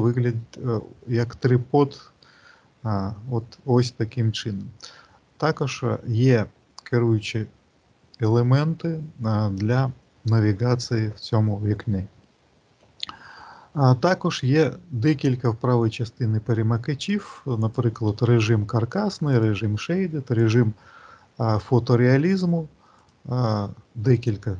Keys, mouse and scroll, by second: 17.7 click.